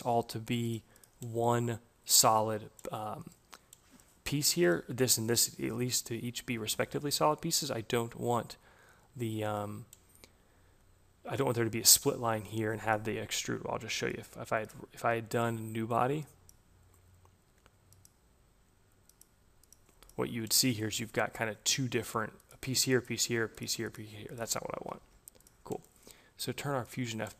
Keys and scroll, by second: 24.4 ctrl+z.